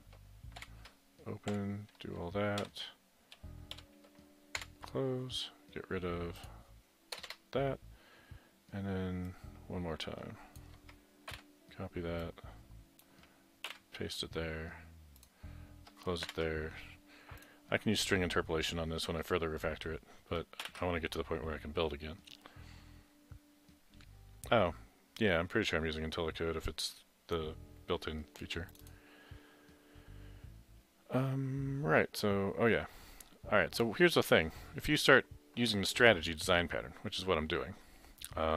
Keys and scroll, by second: 0.0-0.4 typing, 1.5-2.2 typing, 2.7 Down, 3.8 Left, 6.2-7.3 typing, 11.4 ctrl+c, 13.7 ctrl+v, 16.3 typing, 20.7 ctrl+shift+b.